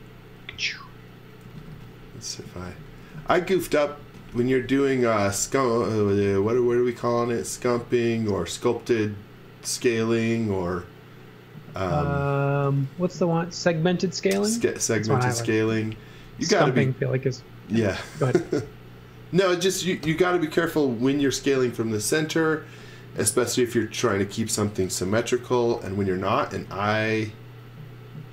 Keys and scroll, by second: 1.4-7.4 typing, 8.5 v, 13.5 space, 15.7 x, 15.9 v, 18.5 space, 20.0 BackSpace, 26.4 x, 26.9 space.